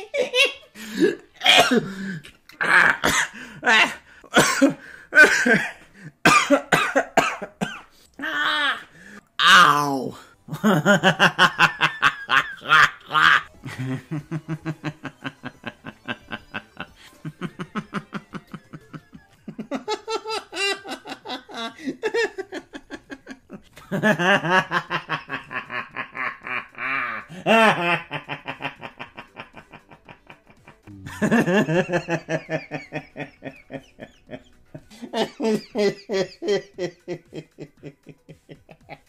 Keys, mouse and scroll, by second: 10.4 ctrl+s, 13.5 click, 17.0 click, 23.8 Delete, 23.8 right click, 23.8 click, 23.8 space, 30.8 space, 31.8 space.